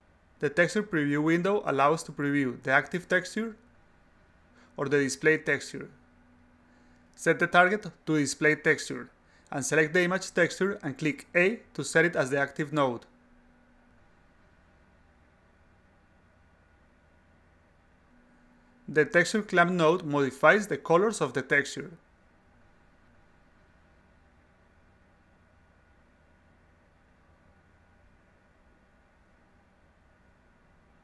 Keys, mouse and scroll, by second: 3.8 click, 7.5 click, 8.8 click, 13.4-14.1 drag, 14.7 click, 15.1 click, 15.4 click, 15.9 click, 16.4 click, 17.5-20.6 drag, 21.4 click, 22.2-23.4 drag, 24.2 click, 24.5-26.3 drag, 26.8-27.4 drag, 27.6-28.3 drag, 28.9 click.